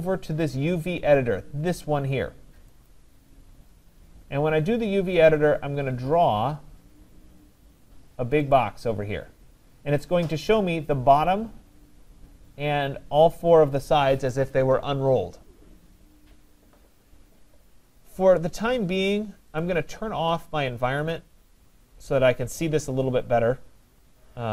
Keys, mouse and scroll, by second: 2.9 click, 3.5 middle click, 3.5 middle click, 5.3 click, 8.0-8.5 scroll, 8.6 click, 19.6 click, 21.2 click.